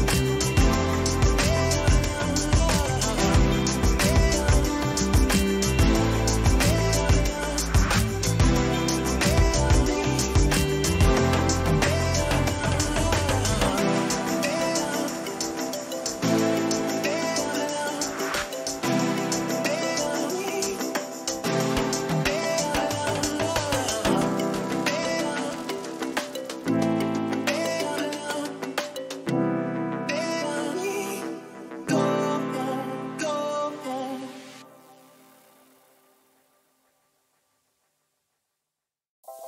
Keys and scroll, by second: 2.0 Down, 13.9 Down, 14.7 Up.